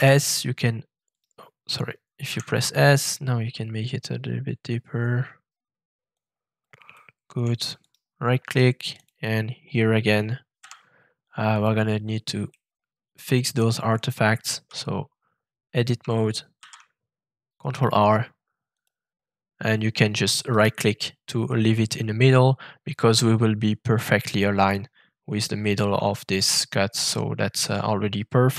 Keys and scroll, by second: 2.2 s, 10.6 f, 14.2 Tab, 16.5 ctrl+r.